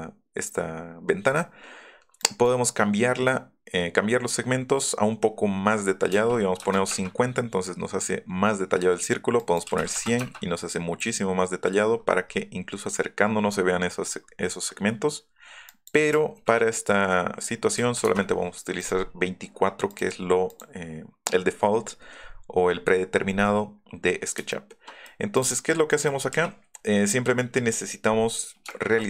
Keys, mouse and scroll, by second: 2.2 click, 6.1 KP_5, 6.6 KP_0, 6.9 KP_Enter, 9.4 click, 9.6 KP_2, 9.9 KP_0, 10.2 KP_Enter, 11.9 middle click, 11.9-14.1 scroll up 7, 12.3 middle click, 12.6 middle click, 12.9 middle click, 15.6 click, 16.2 KP_2, 17.7 KP_4, 18.8 click, 19.1 scroll up 2, 19.9 click, 20.5 click, 24.5 shift+middle click, 25.3 click, 25.9 middle click, 26.2-26.5 scroll up 3, 26.4 l, 27.4 scroll up 2.